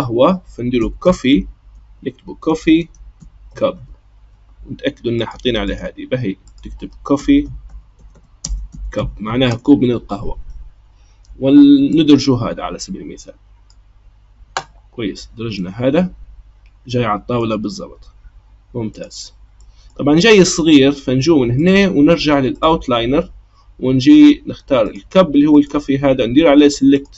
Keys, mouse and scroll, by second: 1.5 f, 5.7 click, 6.4-7.8 drag, 7.8 f, 8.1 e, 15.6-17.8 middle drag, 17.8-19.6 scroll up 1, 19.6-21.6 middle drag, 21.6-24.6 drag, 24.8 click, 25.5-27.1 right drag.